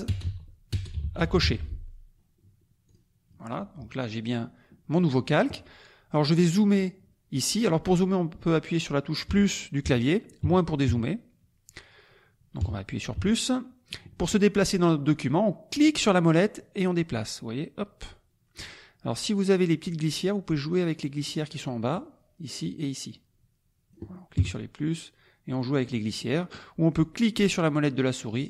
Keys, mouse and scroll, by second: 0.0-1.9 typing, 2.9 click, 9.3 KP_Add, 10.4 KP_Subtract, 12.6 KP_Add, 15.8-18.8 drag, 19.8-22.0 drag, 23.1-24.4 drag, 24.4 KP_Add, 25.6 click, 27.1-28.4 drag.